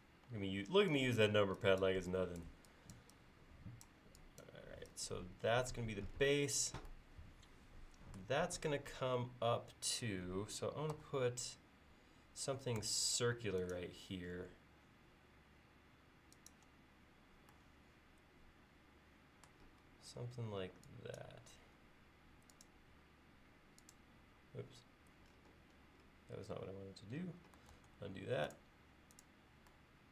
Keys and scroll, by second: 0.3 e, 11.0 c, 12.8 Left, 13.2 Right, 19.8 l, 27.7 super+z.